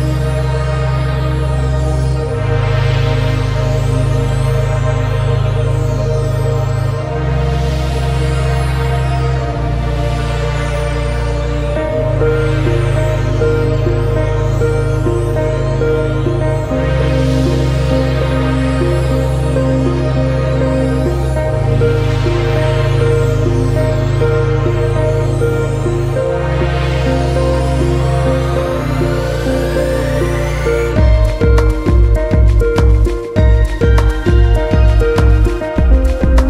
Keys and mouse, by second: 0.9 click, 4.4 ctrl+shift+click, 9.7 ctrl+shift+click, 10.5 click, 14.0 click, 14.9-17.0 drag, 19.8-20.8 drag, 24.3 ctrl+shift+click, 28.1 middle click, 30.0 click, 30.5-32.3 drag, 36.1 click.